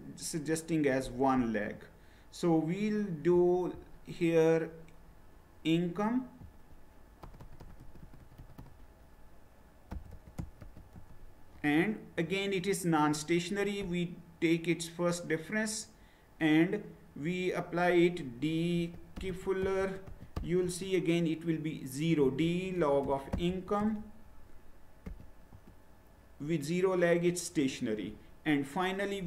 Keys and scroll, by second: 7.2 BackSpace, 7.4 BackSpace, 7.7 BackSpace, 8.2 BackSpace, 9.6-11.1 typing, 18.5-20.8 typing, 21.9-25.1 typing, 25.6 Return.